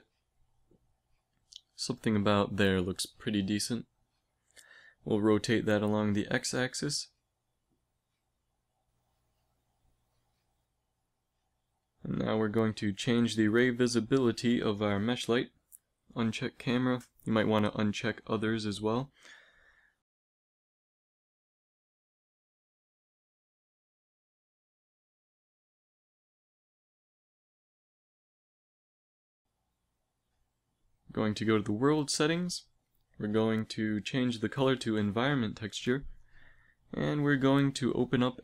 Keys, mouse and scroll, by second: 0.3 g, 3.3 r, 8.7 a, 9.0 middle click, 10.9-16.6 right drag, 14.0-17.4 drag, 17.8-19.9 right drag, 19.0-21.4 drag, 22.8 KP_0, 31.9-38.4 drag.